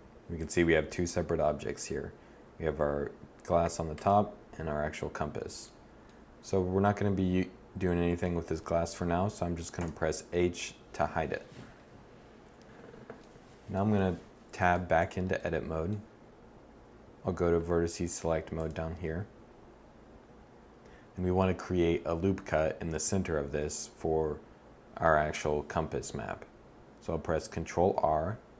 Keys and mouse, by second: 5.7-7.6 middle drag, 9.5 h, 12.9-13.7 middle drag, 13.7 Tab, 14.6 Tab, 26.7 ctrl+r.